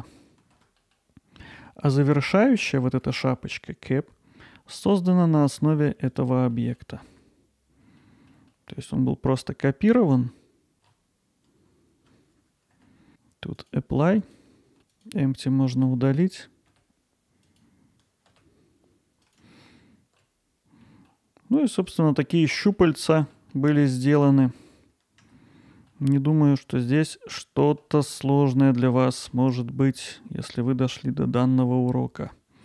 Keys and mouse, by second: 0.8 middle drag, 1.4 middle drag, 1.9 middle drag, 2.8 alt+middle drag, 3.1 middle drag, 4.6 alt+middle click, 5.0-5.4 ctrl+alt+middle drag, 6.5 middle drag, 8.0 alt+middle click, 8.5 middle click, 10.7 shift+d, 12.1 click, 12.1 y, 12.3 middle click, 13.6-14.4 drag, 14.9 click, 17.5 click, 19.2 click, 20.9 middle click, 21.6 alt+middle click, 22.4 middle click, 22.7-23.3 ctrl+alt+middle drag, 23.5 middle click, 24.2 middle click, 25.9 alt+middle click, 26.5 middle click, 27.1 middle click, 30.0-32.3 drag.